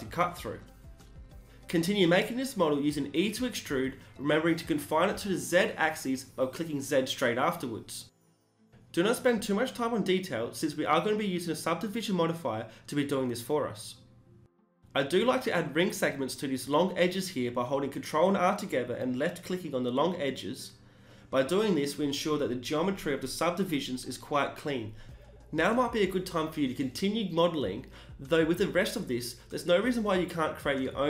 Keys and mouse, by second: 0.1 e, 0.4 g, 2.5 s, 3.5 e, 3.8 g, 5.9 e, 6.4 s, 8.2 e, 8.5 g, 11.5 ctrl+r, 12.1 s, 13.5 ctrl+r, 13.9 s, 15.0 ctrl+r, 15.6 s, 18.5-20.4 drag, 18.9 g, 20.8 s, 21.9 e, 22.3 s, 24.8 e, 25.1 g, 28.9 e, 29.3 s.